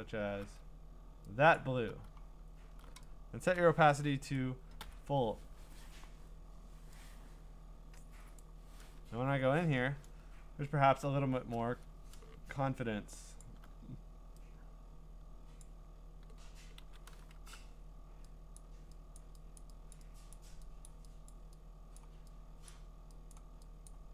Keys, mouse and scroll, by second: 0.1 click, 0.1 scroll, 1.5 alt+click, 2.6-3.0 scroll, 3.5 click, 4.8 0, 8.4 click, 9.7-10.5 scroll, 13.4 alt+click, 15.6 click, 16.8 ctrl+z, 17.3 shift+1, 17.6 !, 18.6 click, 19.2 click, 19.6 click, 19.9 click, 20.3 click, 20.9 click, 21.3 click, 22.0 click, 22.7 click, 23.3 click, 23.9 click.